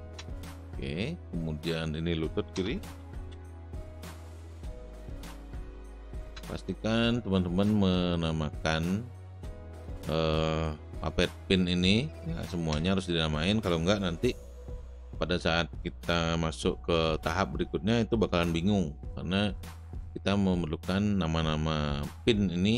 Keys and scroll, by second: 0.0-0.2 typing, 2.6 Return, 2.7-6.3 typing, 12.8 Return.